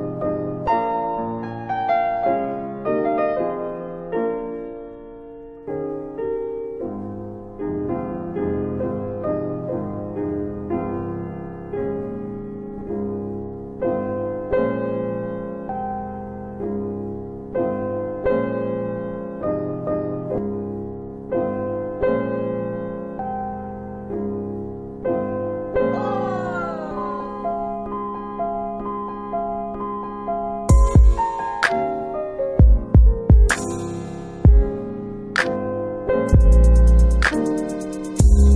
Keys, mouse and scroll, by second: 1.1 alt+middle click, 1.5 alt+middle click, 2.0 click, 2.5 click, 3.2 click, 4.2 alt+middle click, 4.7 alt+middle click, 5.1 click, 5.6 click, 6.3 alt+middle click, 6.6 alt+middle click, 6.9 alt+right click, 7.2 alt+right click, 7.8 alt+right click, 8.7 alt+right click, 9.4-10.0 scroll up 1, 10.0 scroll up 1, 10.2 alt+middle click, 10.9 alt+middle click, 12.1 click, 12.9 click, 13.7 click, 15.6 click, 17.3 click, 18.6 click, 20.2 click, 22.2 click, 24.0 alt+middle click, 24.4 alt+middle click, 25.2 click, 25.8 click, 27.3 click, 29.6 click, 29.7 click, 30.1 click, 30.9 alt+middle click, 31.1 alt+middle click, 31.6 alt+click, 31.8 alt+click, 32.1 alt+right click, 32.4 alt+right click, 32.7 alt+right click, 33.2 alt+right click, 34.4 alt+right click, 34.8 alt+right click, 35.3 alt+click, 36.8 alt+click, 37.4 alt+click.